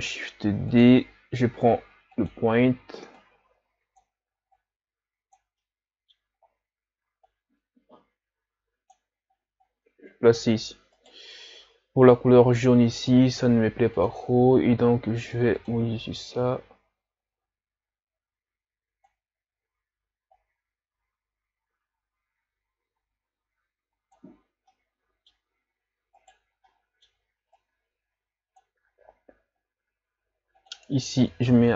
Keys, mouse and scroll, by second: 2.3 click, 3.3-5.7 drag, 5.7 middle click, 6.4 scroll up 2, 7.5-11.0 drag, 11.0 right click, 14.5 click, 16.9 click, 24.9-26.4 middle drag, 26.4 right click, 26.7 middle click, 27.5-31.7 drag.